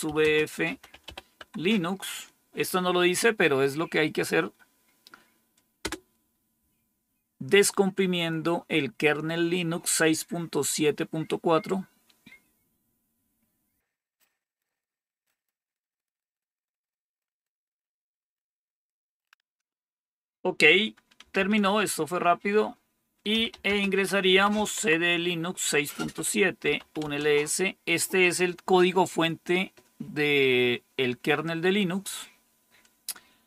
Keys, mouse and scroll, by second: 0.0-1.4 typing, 5.7 Return, 20.9-21.7 typing, 23.0-24.7 typing, 25.9-27.2 typing.